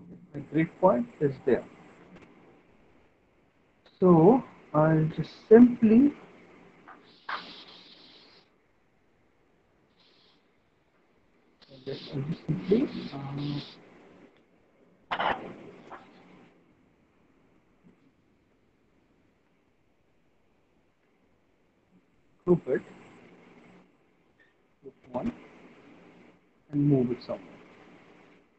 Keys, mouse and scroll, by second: 0.0 alt+middle click, 0.5 middle click, 2.2 alt+middle click, 2.5 middle click, 3.8 alt+middle click, 4.4 middle click, 4.7 alt+middle click, 6.0 click, 7.7 alt+middle click, 8.1 right click, 14.1 alt+middle click, 14.5 middle click, 16.8 alt+middle click, 17.5 middle click, 18.7 w, 19.6 alt+middle click, 20.0 middle click, 21.0 alt+middle click, 22.7 click, 24.7 click, 26.8 click, 28.0 ctrl+z.